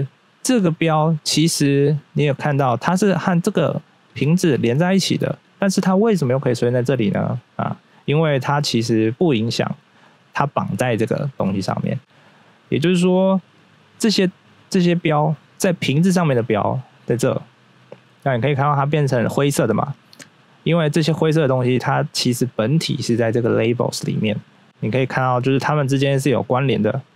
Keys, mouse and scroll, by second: 0.3 right click, 1.8 right click, 2.4 right click, 3.0 right click, 3.6 right click, 4.0 right click, 4.3 right click, 4.8 right click, 5.4 right click, 10.8 right click, 11.4 right click, 12.0 scroll down 1, 13.5 click, 15.7 right click, 16.4 right click, 20.4-21.6 scroll up 1, 24.6 click.